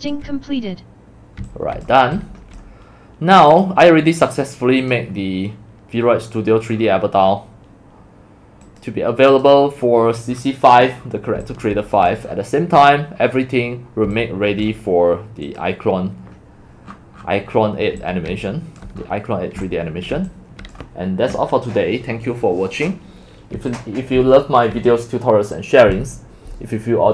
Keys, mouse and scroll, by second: 0.0-2.7 typing, 3.6 click, 4.2 click, 5.1 click, 6.2 middle click, 8.7 click, 11.0 middle click, 11.4 x, 17.5 middle click, 18.0-20.2 typing, 18.2 click, 20.5 click, 23.6-25.2 typing.